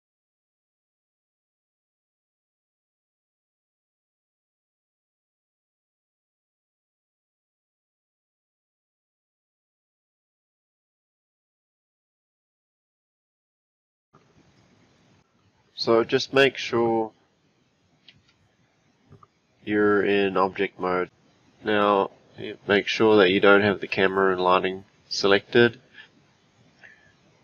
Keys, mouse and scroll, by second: 0.6 click, 1.3 click, 1.4 click, 1.6 click, 2.0 scroll down 2, 2.3 shift+click, 2.6 click, 2.7 click, 2.8 click, 3.2 click, 3.3 click, 3.5 Tab, 3.7-4.1 scroll down 2, 4.2 shift+click, 4.3 click, 4.7 click, 5.0 click, 5.4 click, 5.5 shift+click, 5.7 click, 6.3 click, 6.5 click, 6.7 scroll down 1, 6.9 click, 8.8 click, 10.0 Tab, 10.7 click, 10.8 middle click, 10.9 click, 11.0 g, 11.9 Tab, 12.0 click, 12.3 g, 12.7 click, 12.9 click, 13.5-13.8 scroll down 1, 14.5 click, 15.0-16.6 scroll down 4, 16.6 click, 18.0 a.